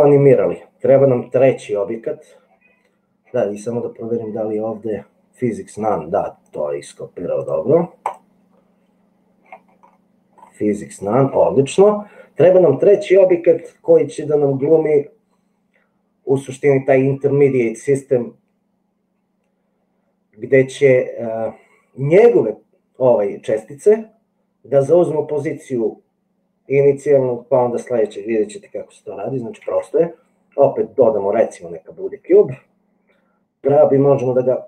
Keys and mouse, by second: 8.1 click, 29.7 shift+a, 33.7 g.